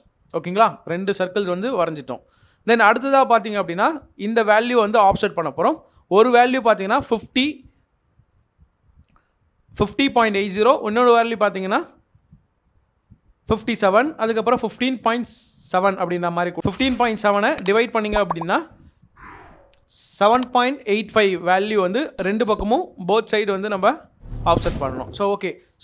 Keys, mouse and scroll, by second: 0.9 middle click, 3.6 scroll down 1, 6.0 Escape, 25.0 middle click.